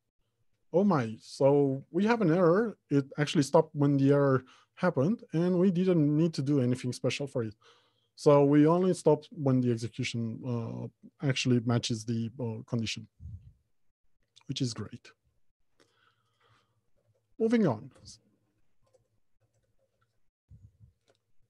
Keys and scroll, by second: 15.4 ctrl+F2, 17.4 alt+Home, 17.8 Left, 18.2 Return.